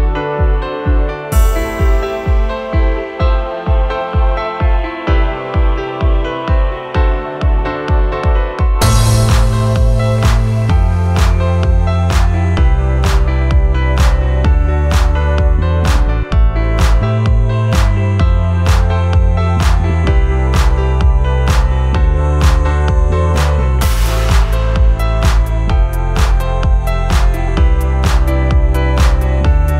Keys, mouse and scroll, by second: 14.0 ctrl+z, 22.4 ctrl+j, 23.5 ctrl+t, 26.6 ctrl+t.